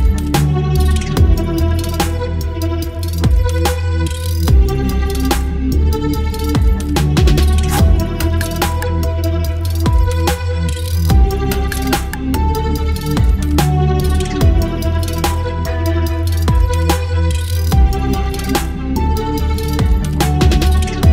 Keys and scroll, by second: 1.6 ctrl+BackSpace, 1.9 ctrl+d, 6.4 ctrl+BackSpace, 6.7 ctrl+d, 12.1 Delete, 12.5 ctrl+d, 17.0 Delete, 17.3 ctrl+d.